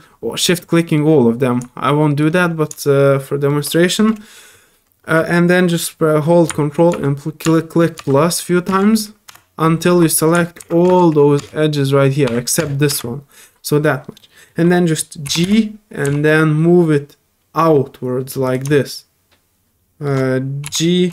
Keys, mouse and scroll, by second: 0.6 shift+middle click, 1.6 shift+middle click, 2.7 shift+middle click, 14.2 middle click, 14.7 middle click, 18.4 right click, 18.7 shift+middle click.